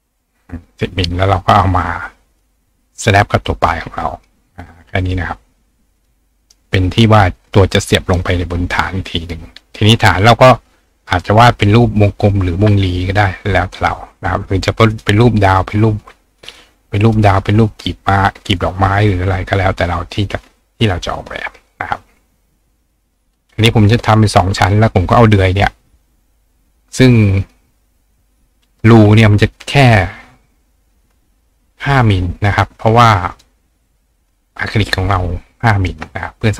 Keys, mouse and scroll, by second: 2.3 click, 3.5 click, 4.6-5.0 drag, 6.0 click, 6.4 click, 11.0 click, 14.9 click, 15.8-17.1 drag, 18.4 click, 19.6-22.2 drag, 22.2-23.8 shift+right drag, 23.9-24.3 shift+drag, 24.4 click, 25.1-28.2 drag, 28.8-33.3 drag, 33.4-36.5 drag, 34.8-35.9 ctrl+right drag.